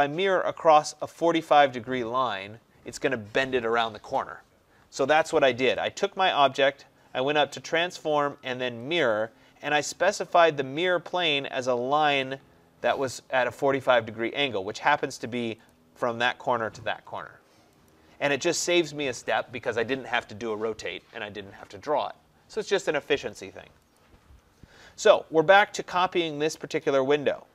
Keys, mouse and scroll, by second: 6.5 click, 7.9 click, 15.8 click, 18.0 click, 24.0 click.